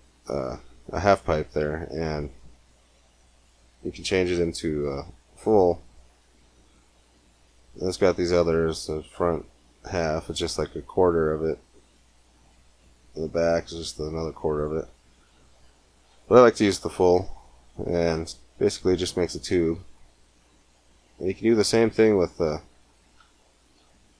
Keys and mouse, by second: 1.9-3.7 drag, 3.8-5.7 middle drag, 7.3-9.3 drag, 11.1 middle click, 11.4-13.4 drag, 13.4 middle click, 14.3-16.0 drag, 16.2-17.2 middle drag, 18.4-19.8 middle drag, 21.7 middle click, 22.6-24.1 drag.